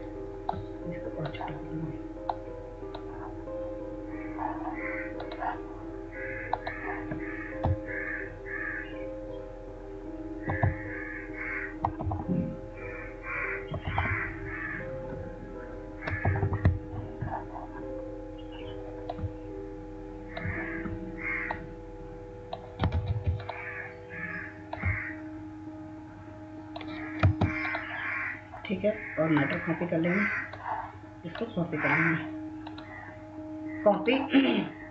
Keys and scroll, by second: 8.7-11.1 Up, 12.2 Up, 12.3 Up, 12.6-13.5 Up, 13.7-14.0 Up, 14.1 Up, 14.6 Up, 15.7-16.6 Right, 16.8 Down, 17.0 Down, 23.6 ctrl+z.